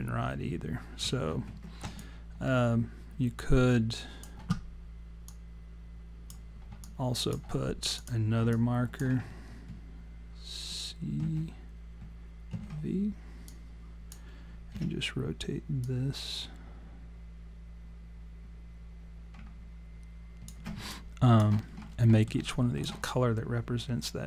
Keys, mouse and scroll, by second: 1.3 ctrl+z, 2.0 alt+click, 5.3 click, 6.9 alt+click, 7.9 click, 8.5 alt+click, 11.2 ctrl+c, 12.6 ctrl+v, 13.5 click, 14.8 e, 15.8 click, 20.9 alt+click, 21.7-22.2 scroll up 2, 22.1 alt+middle click, 22.5 alt+click.